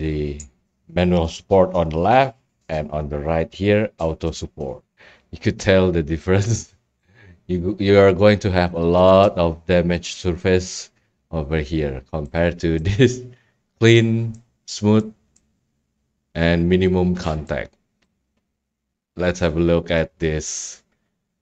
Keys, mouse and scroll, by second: 2.0 ctrl+click, 7.2 right click, 7.4 scroll, 8.2 scroll, 11.8 scroll, 13.2-13.9 right drag, 14.3-16.4 right drag, 18.0 right click, 19.3 click, 19.7 scroll, 20.4 scroll.